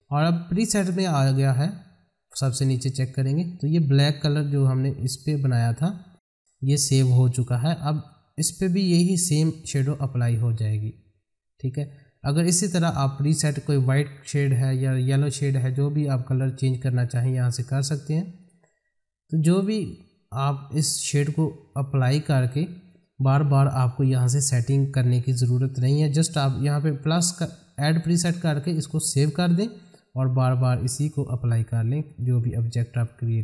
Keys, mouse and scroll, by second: 1.7-2.6 scroll down 1, 2.6-5.4 drag, 7.9 click, 17.0 click, 28.6 click, 29.9-31.8 scroll down 1, 32.1 click.